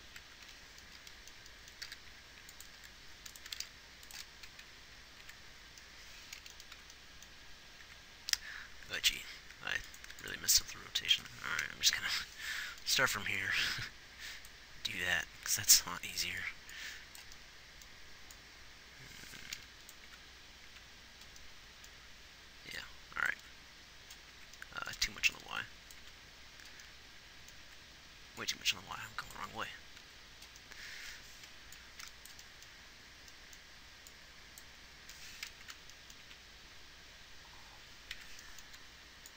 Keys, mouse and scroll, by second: 0.1 Left, 0.5 Right, 3.1 r, 3.9 r, 4.9 Left, 5.6 Right, 7.1 Left, 8.2 Right, 10.4 x, 12.5 Right, 20.4 Left, 21.0 Right, 23.7 Left, 24.7 Right, 26.4 Left, 28.0 Right, 29.8 Left, 30.3 Right, 35.9 Left, 36.6 Right, 38.6 Right.